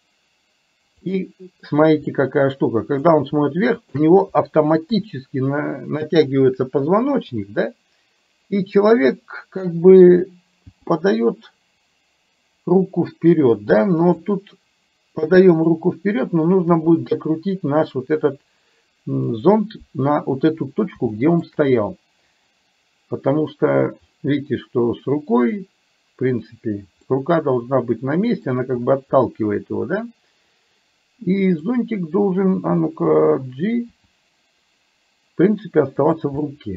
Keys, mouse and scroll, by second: 2.1-3.1 middle drag, 4.0 shift+click, 4.9 KP_3, 10.6 g, 16.8 r, 21.1 shift+middle click, 27.3-28.6 middle drag, 29.3-31.6 middle drag, 34.0 g, 36.6-36.7 middle drag.